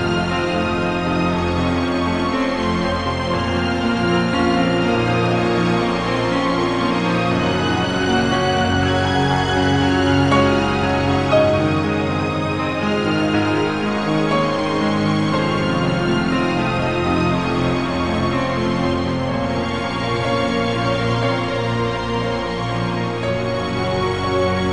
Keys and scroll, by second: 0.1 i, 1.0 i, 5.9-6.3 typing, 9.6 -, 10.9-13.3 typing, 14.9 i, 15.4 -, 16.0 i, 16.8 ctrl+s, 19.1 ctrl+z, 19.1 ctrl+z, 22.0-24.7 typing, 23.7 ctrl+z.